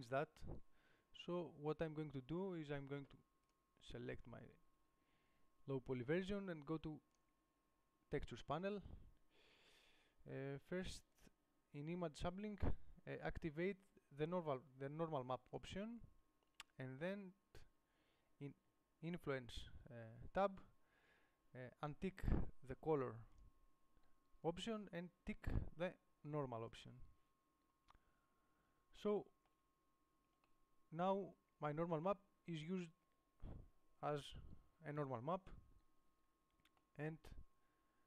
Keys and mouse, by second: 15.8-20.5 drag, 27.8-29.7 middle drag.